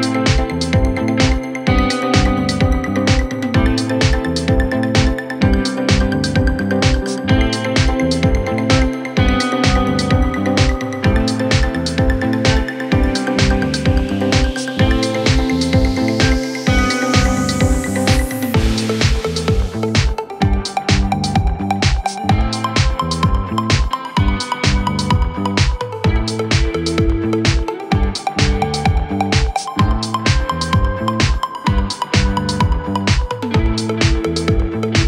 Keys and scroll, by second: 6.1 shift+Page_Down, 7.7 Delete, 25.0 w, 28.1 ctrl+z.